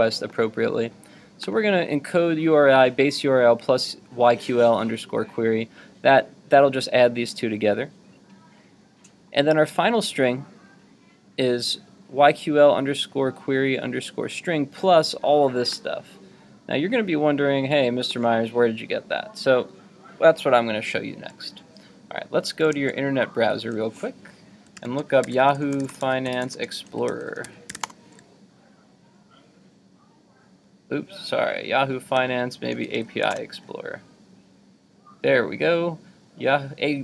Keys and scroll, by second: 22.7 super+Tab, 24.8 super+t.